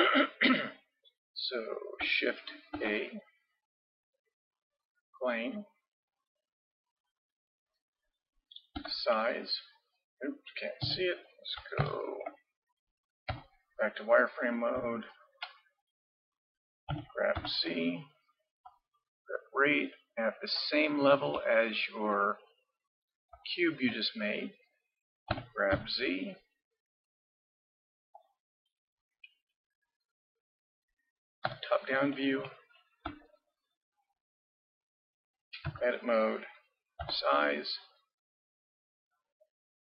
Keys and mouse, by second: 2.7 shift+a, 7.1 middle click, 8.8 s, 11.8 ctrl+KP_3, 13.3 z, 14.1 middle click, 16.9 g, 25.3 g, 30.0 middle click, 31.5 KP_7, 35.7 Tab, 37.0 s.